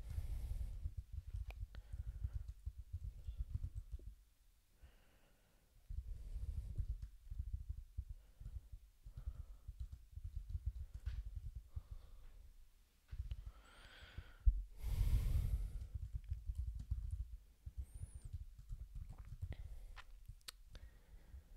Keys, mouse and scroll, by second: 0.0-3.4 typing, 5.9 alt+b, 6.3 g, 6.5 i, 6.8 space, 7.3 alt+b, 8.5 ctrl+e, 9.2 ctrl+b, 9.4-11.7 typing, 12.8-13.6 typing, 15.0-17.7 typing, 18.7 ctrl+g, 18.8 ctrl+a, 19.0 alt+q, 19.5 ctrl+s.